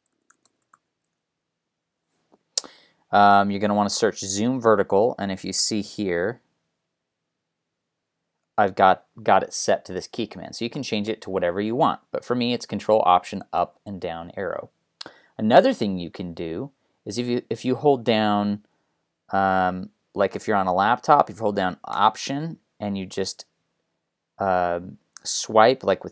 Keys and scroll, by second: 0.0-1.3 typing.